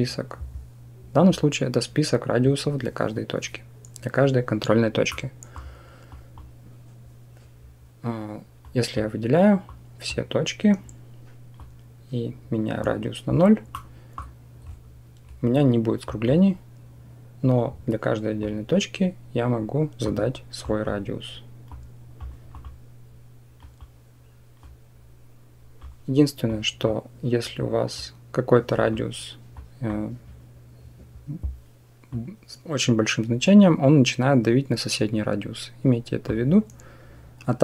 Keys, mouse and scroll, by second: 4.9 middle click, 6.0 click, 8.5 click, 9.6-12.6 drag, 13.6 middle click, 15.9 click, 18.2-19.9 drag, 20.6-22.0 drag, 22.3 click, 23.5 click, 24.4-25.6 drag, 26.4 click, 27.8 click, 29.4 click, 32.0-36.1 drag.